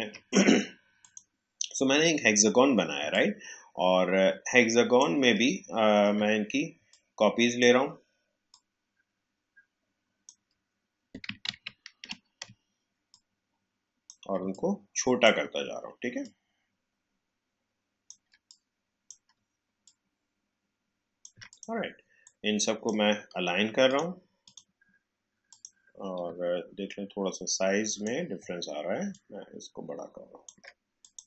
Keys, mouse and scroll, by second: 3.1 alt+click, 6.8-11.4 shift+drag, 11.4 ctrl+z, 13.0-23.8 shift+drag, 26.3-26.8 alt+scroll up 1, 27.8 click, 29.0-31.2 alt+shift+drag.